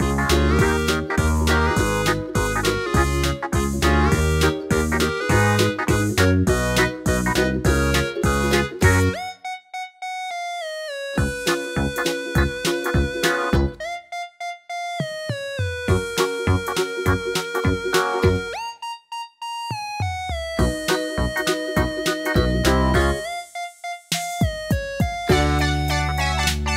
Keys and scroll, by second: 1.5-2.4 typing, 4.3 typing, 6.1-8.3 typing, 22.2-23.0 typing.